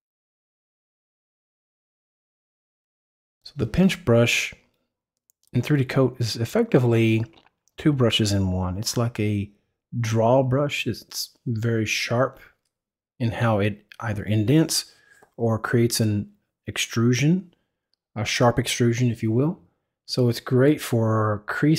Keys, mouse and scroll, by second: 0.0 right click, 0.0 click, 1.0 click, 1.5 click, 3.0 click, 3.1 click, 3.2 click, 3.5 click, 3.8 click, 4.7 click, 4.9 click, 5.5 click, 6.4 click, 7.2 click, 7.4 click, 7.6 click, 7.8 click, 8.7 click, 9.2 click, 9.8 click, 10.6-11.9 drag, 12.5 click, 12.6 click, 12.9 click, 20.9 click.